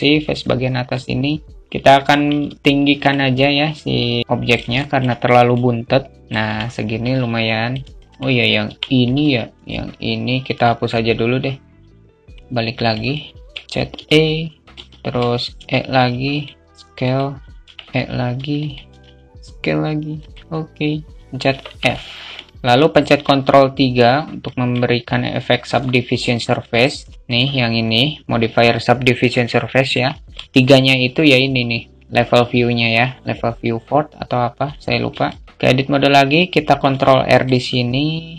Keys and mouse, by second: 0.3-1.6 drag, 1.6 Tab, 1.9 alt+z, 2.2-4.3 drag, 4.3 alt+shift+middle click, 5.0-6.4 drag, 6.4 alt+Tab, 6.8 alt+z, 6.8 alt+middle click, 7.3 shift+middle click, 8.1 Tab, 8.5 alt+z, 9.1 click, 12.3 alt+z, 12.3 2, 12.4 click, 20.6 click, 21.1 alt+f, 21.3-22.3 middle drag, 22.5 ctrl+Tab, 23.9 alt+middle click, 27.1-34.1 drag, 34.7 alt+shift+middle click, 35.3 Tab, 36.4 ctrl+r.